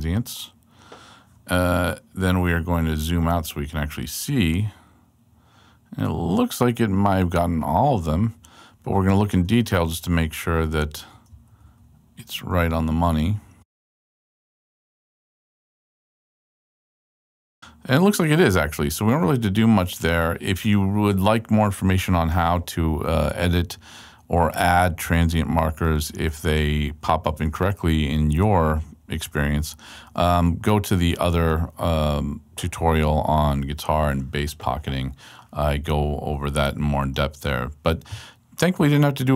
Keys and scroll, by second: 3.3 super+Left, 4.5 super+Left, 6.7 super+Right, 7.1 super+Left, 8.7 super+Right, 9.6 alt+super+Right, 9.9 alt+super+Left, 10.3 alt+Right, 11.3 alt+super+Right, 12.5 alt+super+Right, 13.2 alt+Right, 17.2 alt+Left, 19.0 super+Left, 22.0 super+Left, 24.6 super+Right, 27.9 super+Left.